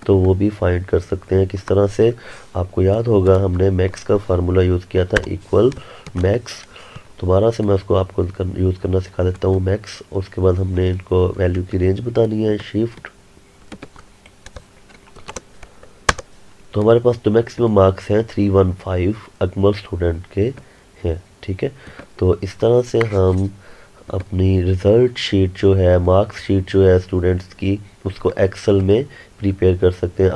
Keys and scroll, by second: 11.4 ctrl+Num_Lock, 16.2 Return.